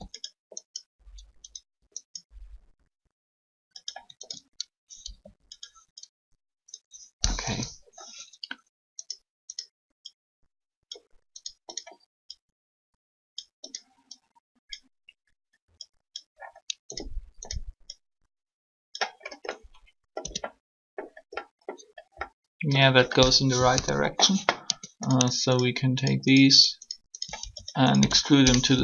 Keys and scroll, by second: 5.0 shift+r, 7.3 3, 20.2 Tab, 23.6 3, 24.6 Tab, 27.8 shift+s, 28.7 0.